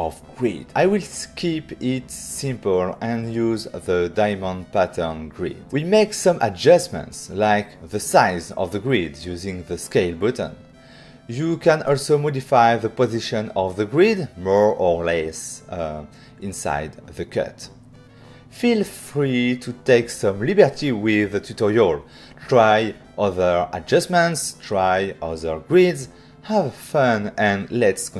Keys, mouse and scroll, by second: 1.7 click, 4.7 click, 4.9 click, 5.7 click, 7.6 click, 10.1 click, 10.9 click, 11.3 click, 11.8 click, 12.9 click, 15.5 click, 16.5 click, 18.6 click, 19.5 click, 19.7 click, 21.3 <.